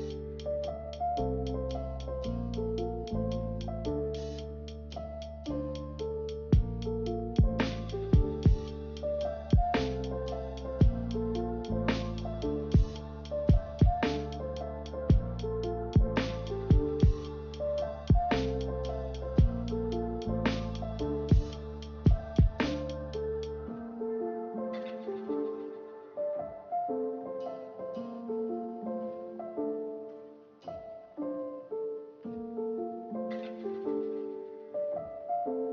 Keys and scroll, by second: 13.8 ctrl+z, 14.0 ctrl+z, 14.2 ctrl+z, 28.6 a.